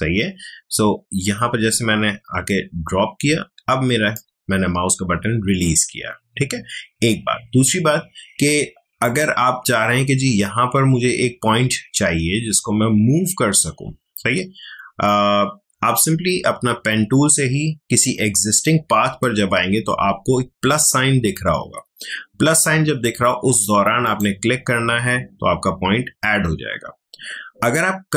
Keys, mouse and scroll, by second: 9.0 click, 9.0 click, 24.0 click.